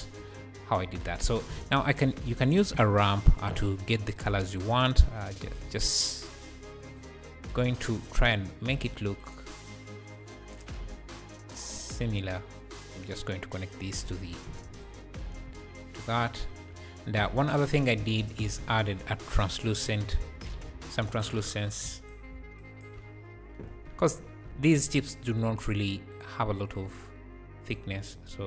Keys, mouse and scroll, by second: 0.5-1.0 scroll down 7, 1.3 scroll up 2, 1.5 shift+a, 4.2 shift+a, 4.7 scroll up 4, 5.3-6.5 drag, 8.8 click, 9.6 click, 13.6-14.3 drag, 14.8 ctrl+shift+click, 16.2 scroll down 4, 16.6-17.0 scroll up 3, 17.6 click, 18.0 shift+a, 22.6-25.4 ctrl+shift+right drag, 24.2-24.6 scroll up 4, 24.6 `, 26.1 click, 26.9 click.